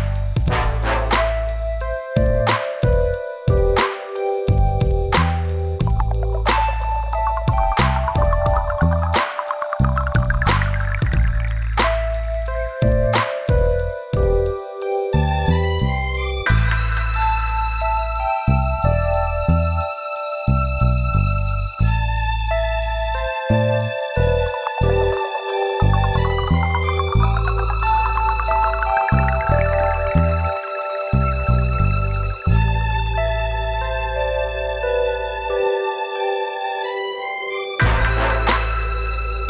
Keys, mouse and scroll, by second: 0.4 click, 2.1 click, 4.7 click, 4.9 right click, 5.7 click, 7.1 click, 11.6 scroll up 1, 14.8 click, 16.1 right click, 16.8 click, 18.8 click, 19.1 click, 22.4 click, 23.0 right click, 23.1 double right click, 23.8 middle click, 25.9 right click, 26.1 right click, 26.8 click, 27.5 click, 29.5 click, 29.7 click, 29.7 click, 29.8 double click, 30.1 double click, 31.1 middle click, 31.8 click, 32.5 middle click, 33.4 click, 34.8 click, 38.5 middle click.